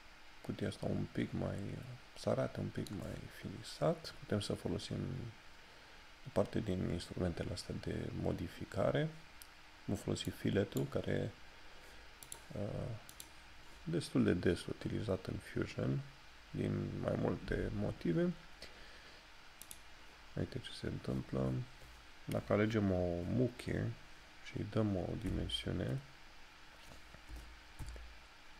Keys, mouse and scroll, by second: 7.9 middle click, 10.3 right click, 18.4 scroll up 1, 23.6 click.